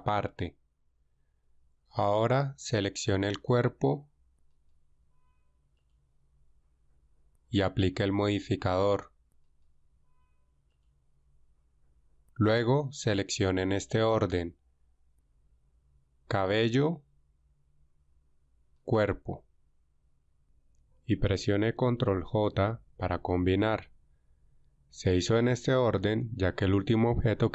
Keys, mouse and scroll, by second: 4.3 alt+right click, 16.3-17.7 right drag, 18.8-20.1 shift+right drag, 22.4 ctrl+j.